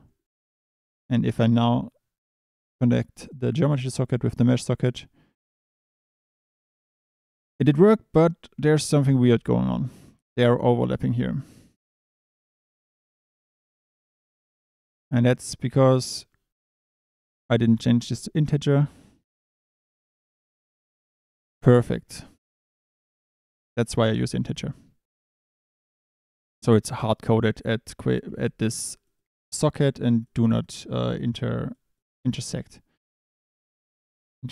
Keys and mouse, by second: 0.8 click, 3.6 drag, 5.6 click, 7.6 click, 8.5 Tab, 10.6 shift+click, 17.0-18.2 drag, 19.9-20.5 drag, 22.1 Tab, 23.7 click, 26.6 Tab, 27.4 click, 28.3 1, 30.2 click, 30.6 click, 31.1 drag, 32.5 click.